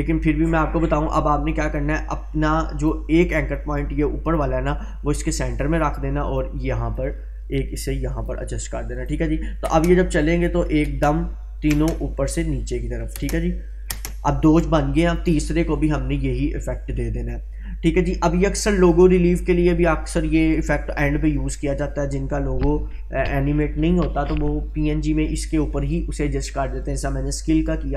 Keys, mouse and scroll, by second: 9.7 space, 12.3-13.2 click, 13.1 space, 14.6-15.2 drag, 18.9-20.8 scroll up 1.